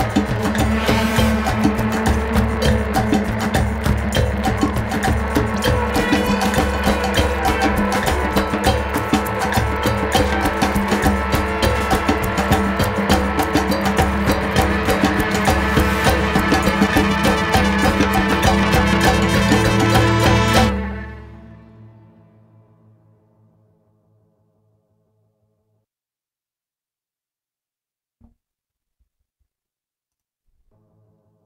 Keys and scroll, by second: 13.1 super+=.